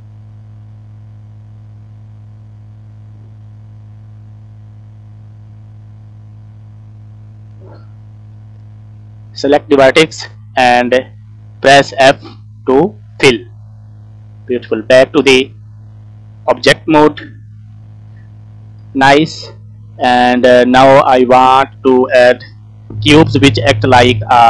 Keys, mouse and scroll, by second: 1.7 alt+click, 4.1 shift+click, 6.2 alt+shift+click, 6.9 scroll down 3, 7.2 middle click, 7.6 click, 8.2 scroll up 2, 8.9 shift+middle click, 12.6 f, 13.0 scroll down 2, 13.2 middle click, 13.9-14.6 scroll up 1, 14.7 Tab, 15.2 scroll down 1, 15.4 middle click, 16.7 scroll down 1, 16.8 click, 17.0 middle click, 17.1 click, 17.2 middle click, 17.6 scroll up 2, 18.1-18.5 scroll down 3, 18.5 shift+middle click, 19.4 middle click, 19.9 scroll up 2, 20.3 scroll down 1, 20.4 middle click, 21.2 click, 24.2 shift+middle click.